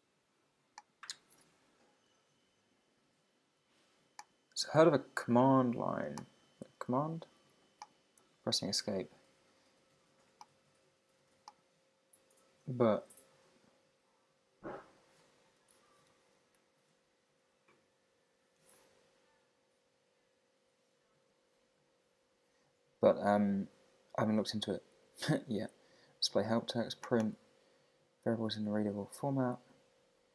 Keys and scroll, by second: 6.7 Escape, 16.8 Return.